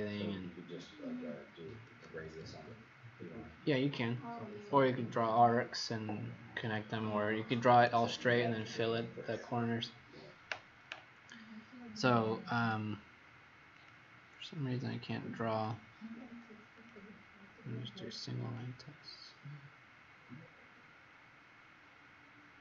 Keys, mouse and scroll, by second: 13.7 click.